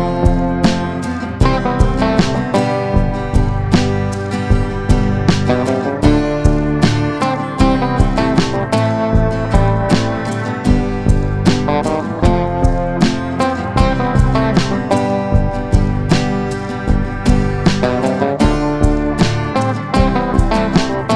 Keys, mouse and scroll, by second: 4.3 click, 4.9 click, 9.3 F9, 9.8-16.2 drag, 16.2 click, 18.6 shift+click, 19.5 shift+click, 20.3 shift+click, 20.6-21.1 right drag.